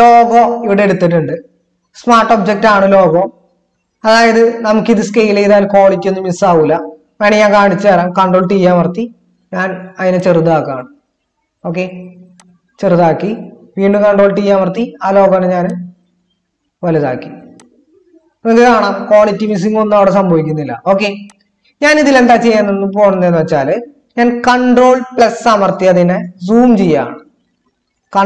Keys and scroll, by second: 8.8 ctrl+t, 14.2 ctrl+t, 25.2 ctrl++, 27.6 ctrl++, 27.9 ctrl++.